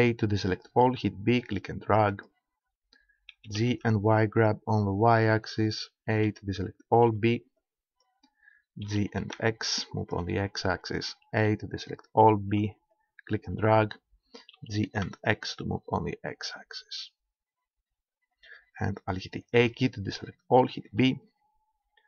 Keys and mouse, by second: 0.9 b, 3.3 g, 5.1-6.8 drag, 6.1 a, 7.1 b, 8.9 g, 10.1 click, 11.3 a, 12.5 b, 14.5 g, 16.5-17.7 drag, 17.9-19.6 drag, 19.6 a, 19.7-20.9 drag, 20.9 b, 21.5 click.